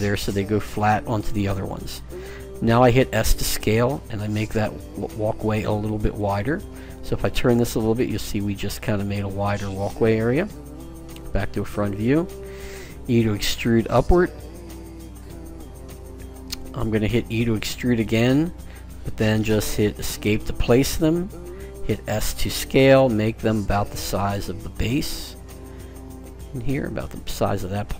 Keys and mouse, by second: 2.9 s, 6.5-10.2 middle drag, 10.2 KP_1, 13.2 e, 17.6 e, 21.9 s.